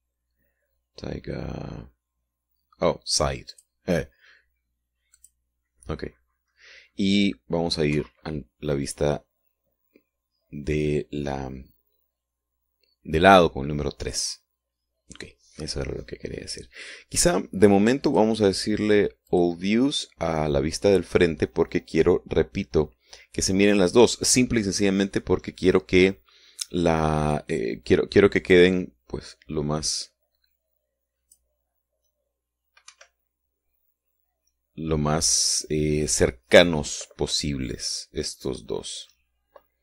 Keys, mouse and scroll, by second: 4.4 click, 6.1 click, 8.9 KP_3, 10.4-10.8 scroll down 2, 11.5 scroll up 2, 12.3 scroll down 2, 19.0 click, 20.2 click, 29.5-31.6 drag, 31.7 click, 33.8 Escape.